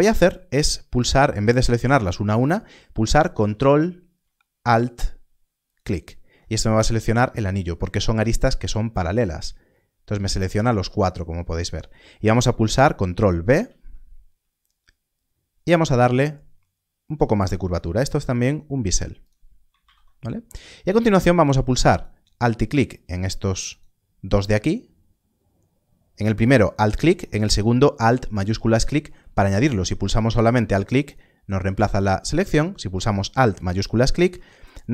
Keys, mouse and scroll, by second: 13.5 ctrl+b, 15.5-16.5 scroll up 1, 19.2 click, 21.9 alt+click, 26.6 alt+click, 29.6 alt+click.